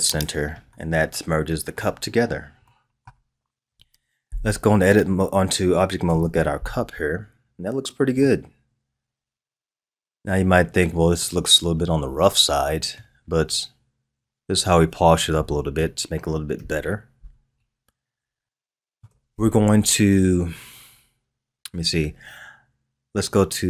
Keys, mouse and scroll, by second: 0.7-2.0 middle drag, 2.0-2.6 scroll down 3, 2.6-3.6 middle drag, 3.6 KP_1, 6.0 Tab, 7.1-8.2 scroll down 3, 8.2-11.2 middle drag, 15.3 KP_3, 16.5 KP_1, 17.7-18.4 scroll up 3, 18.4-21.4 shift+middle drag.